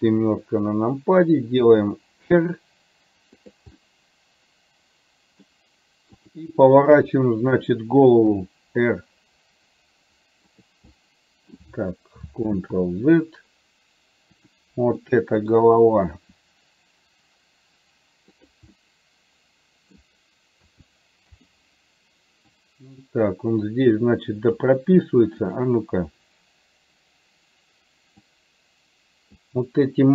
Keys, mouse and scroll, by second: 0.1 KP_7, 1.7 r, 3.9-5.6 middle drag, 6.4 click, 7.1 KP_7, 8.5 r, 11.0 middle click, 12.6 ctrl+z, 14.4 click, 15.1 middle click, 16.6 r, 18.9-20.1 middle drag, 20.7 a, 21.5 i, 22.6-24.7 drag, 28.4-29.5 drag.